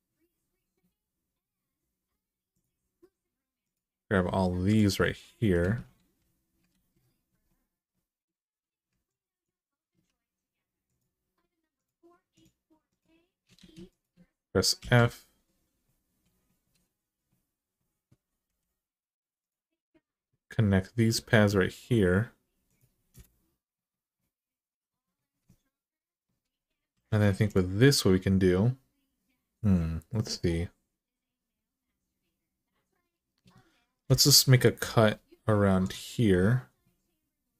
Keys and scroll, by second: 5.7 alt+z, 6.5 ctrl+z, 13.4 ctrl+z, 14.6 f, 18.2 k, 22.9 Return, 26.7 1, 33.8 k.